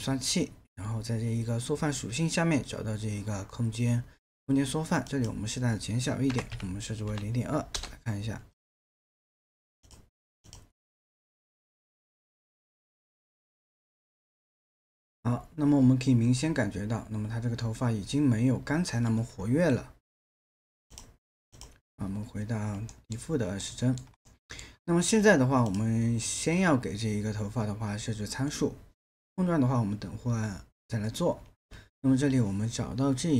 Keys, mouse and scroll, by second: 6.3 KP_0, 6.5 KP_Decimal, 7.1 KP_2, 7.8 Return, 22.9 alt+middle click.